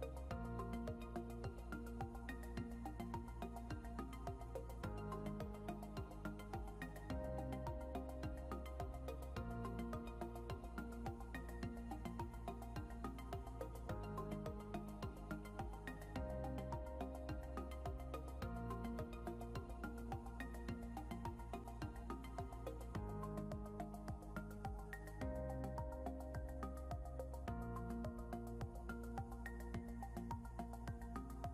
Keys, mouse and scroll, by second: 0.9 click, 4.5 click, 5.2 scroll down 1, 6.9 click, 14.3 scroll down 1, 17.1 scroll up 1, 18.6 click, 24.3 click, 25.5 ctrl+s, 28.2 click, 30.4 click.